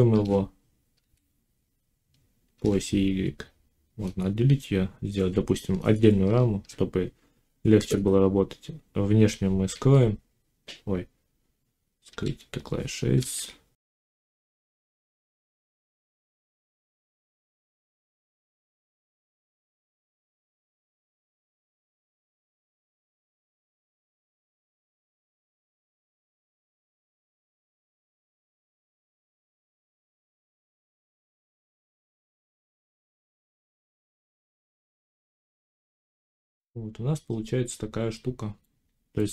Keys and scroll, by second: 0.0 shift+d, 0.9 x, 2.4 y, 6.1 Tab, 9.6 x, 11.9 h, 13.0 ctrl+s, 14.4 1, 16.3 Tab, 16.6 a, 17.0 y, 19.4 z, 20.4 g, 20.8 z, 23.3 g, 23.8 x, 24.5 z, 26.0 7, 29.8 g, 30.4 x, 33.7 g, 35.8 z, 36.8 Tab.